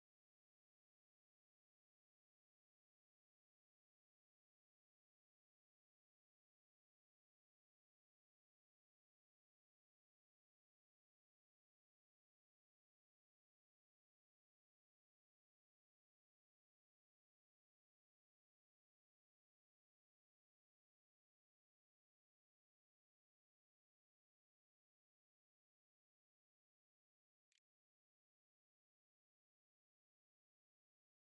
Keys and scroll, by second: 26.3-29.5 typing, 31.2-31.3 typing.